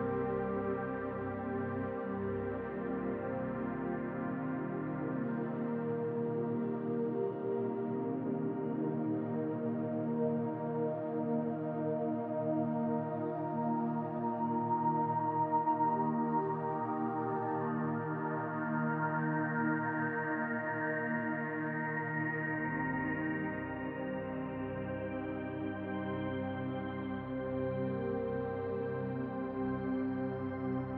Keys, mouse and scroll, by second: 1.7 Tab, 2.3-5.2 scroll up 1, 6.9 click, 8.9 shift+click, 10.6 shift+click, 12.2 shift+click, 13.3 shift+click, 14.7 shift+click, 15.9 shift+click, 18.0 click, 20.0 click, 21.6-22.3 scroll down 2, 22.5 e, 26.9 s, 27.7 Tab.